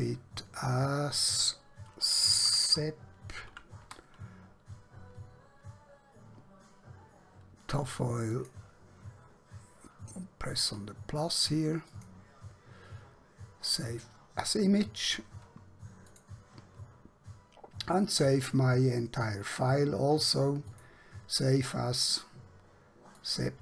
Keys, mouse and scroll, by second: 0.4 click, 2.3-3.8 typing, 8.4 click, 11.8 click, 16.2 click, 20.9 click.